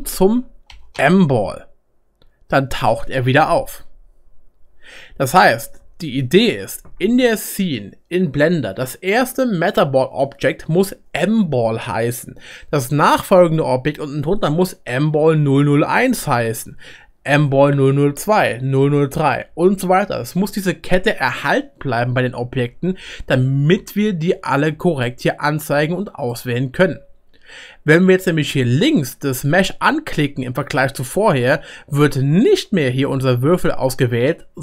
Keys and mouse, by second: 2.1 click, 2.1 middle click, 2.1 right click, 23.5-26.3 drag, 23.5-26.3 middle drag, 23.5-34.6 right drag.